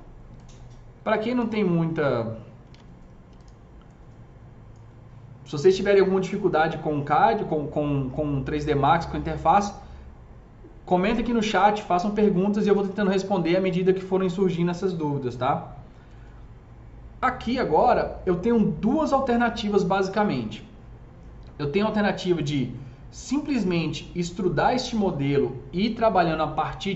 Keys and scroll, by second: 2.5 alt+q.